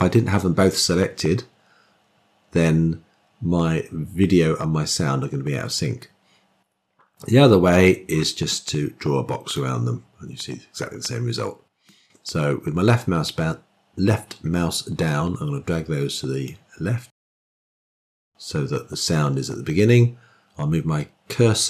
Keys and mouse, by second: 7.6 click, 8.4-9.4 drag, 11.7-16.4 drag.